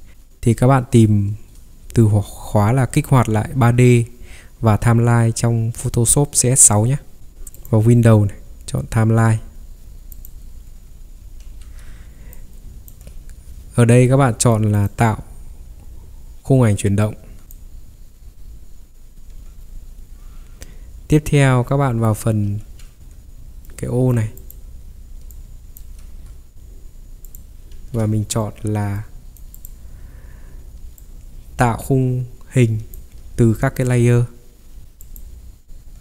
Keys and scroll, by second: 7.2 Escape, 11.5 ctrl+3, 17.1 Escape, 22.6 ctrl+3, 26.1 Escape, 27.8 ctrl+3.